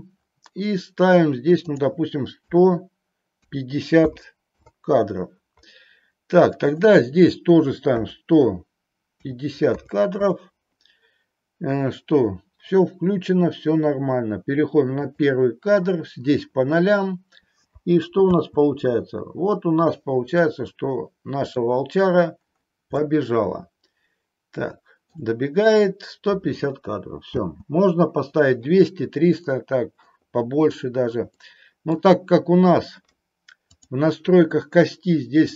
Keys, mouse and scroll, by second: 1.7-5.7 drag, 6.9-10.7 drag, 15.1 click, 18.5 space, 20.6-21.6 middle drag, 23.1-25.2 middle drag, 27.6 space, 29.7 middle click, 31.5 middle click, 33.8 click.